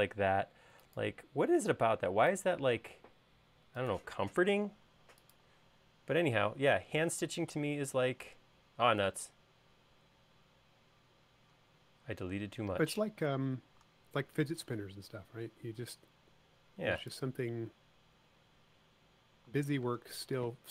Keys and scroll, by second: 19.9 q.